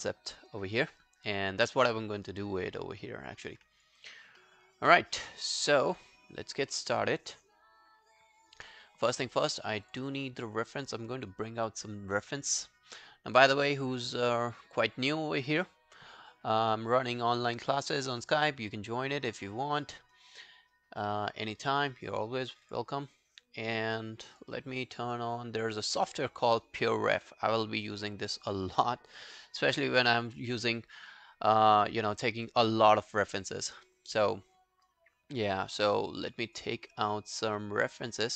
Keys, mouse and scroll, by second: 4.2 alt+scroll up 1, 4.4 alt+middle click, 4.7 alt+right click, 4.9 alt+click, 6.7 alt+middle click, 7.0 alt+right click, 7.2 alt+click, 10.4 double click, 27.0 right click, 32.8 right click.